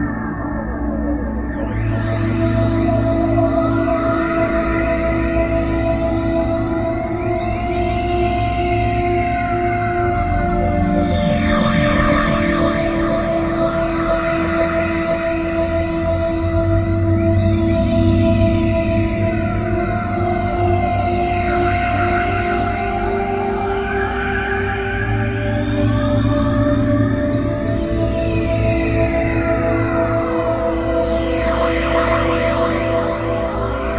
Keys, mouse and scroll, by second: 1.6-2.1 scroll up 2, 3.4 right click, 4.5 right click, 5.8 right click, 7.0 right click, 9.7 click, 10.8 right click, 12.0 middle click, 13.0-13.5 scroll down 2, 14.4 right click, 15.4 right click, 18.3 z, 19.0 right click, 19.8 right click, 20.9 right click, 22.6 middle click, 24.6 right click, 26.4 right click, 27.9 right click, 29.2 right click, 30.6 right click, 32.2 right click, 33.2 middle click.